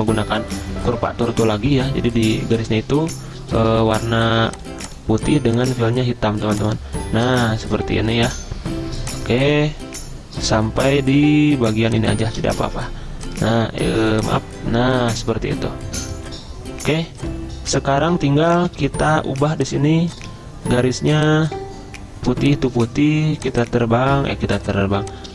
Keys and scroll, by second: 0.0 `, 3.7 d, 12.6 ctrl+z, 13.9 ctrl+z, 18.7 v.